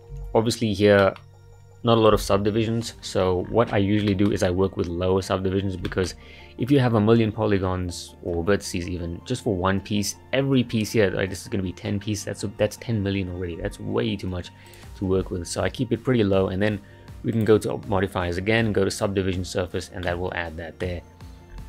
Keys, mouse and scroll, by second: 0.1 Tab, 0.6-1.0 scroll up 1, 1.0-3.4 middle drag, 3.4-4.1 scroll down 4, 4.1-4.4 shift+middle drag, 4.4-5.5 scroll up 2, 5.5-5.9 scroll down 2, 5.9-8.9 shift+middle drag, 14.2-14.7 scroll up 1, 14.7 click, 19.1 click, 20.0-21.5 middle drag, 21.5-21.6 scroll down 4.